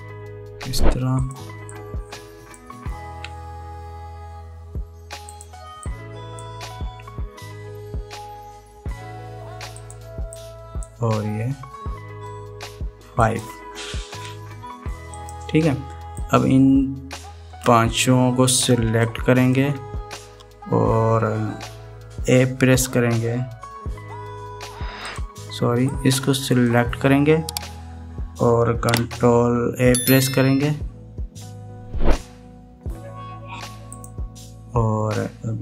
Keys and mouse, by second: 2.7 click, 3.8 e, 6.9 click, 7.8 e, 11.1 click, 12.3 e, 15.9 click, 17.0-18.4 drag, 19.8 shift+click, 26.6 click, 30.6 ctrl+a.